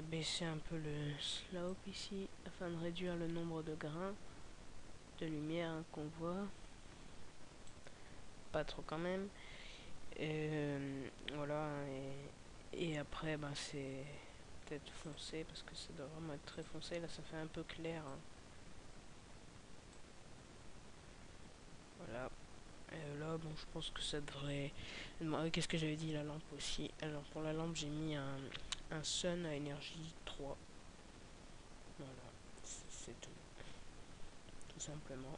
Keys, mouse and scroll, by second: 27.5 right click.